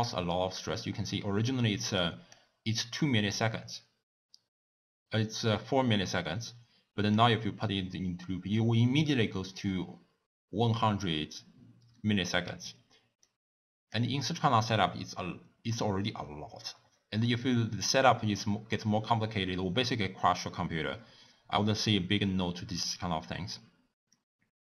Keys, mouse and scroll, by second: 2.4 click, 7.4 click.